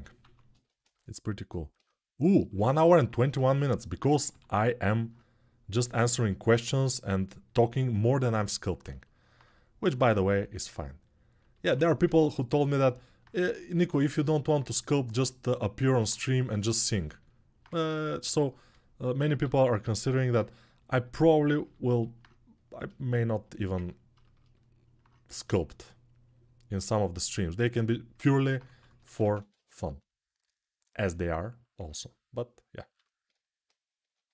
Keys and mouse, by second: 0.0 alt+q, 2.6-34.3 drag, 4.0 g, 11.5 1, 19.2 g, 28.4 ctrl+z, 28.6 ctrl+z.